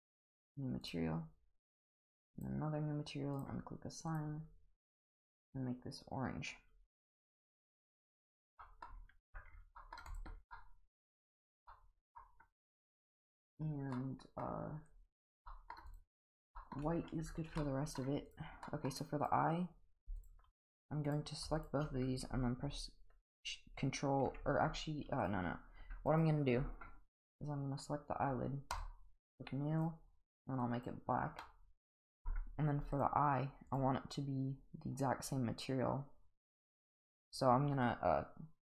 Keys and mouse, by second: 0.2 click, 0.9 click, 1.7 click, 2.4 click, 3.4 click, 4.1 click, 8.6 middle drag, 9.2 Tab, 9.8 middle drag, 10.1 click, 10.5-11.2 middle drag, 11.7-12.2 middle drag, 13.9-14.4 middle drag, 15.2 click, 15.5 middle drag, 15.9 click, 16.6 shift+middle drag, 17.6-18.0 middle drag, 18.3 click, 18.7 middle drag, 19.2 click, 21.1 click, 21.6 shift+click, 25.2 click, 25.8 g, 28.7 click, 29.8 click, 31.4-32.3 middle drag, 32.9 click, 33.7 click, 36.5 click.